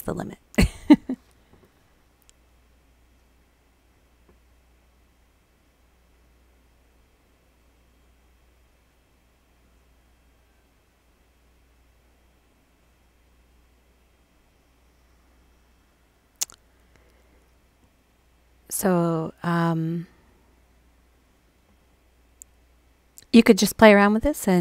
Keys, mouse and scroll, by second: 13.7 click, 20.3-21.2 drag.